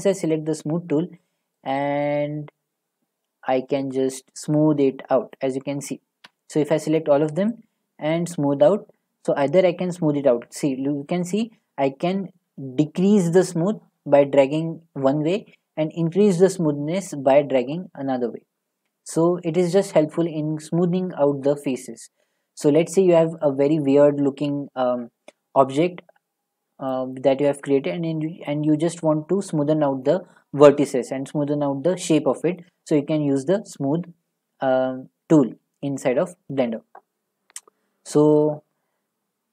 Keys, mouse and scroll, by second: 0.2 click, 5.3 click, 6.2 a, 6.6-8.5 drag, 26.9-30.0 drag, 30.0-32.6 middle drag, 32.6 scroll, 33.5 middle click, 37.6 click, 39.3 middle click.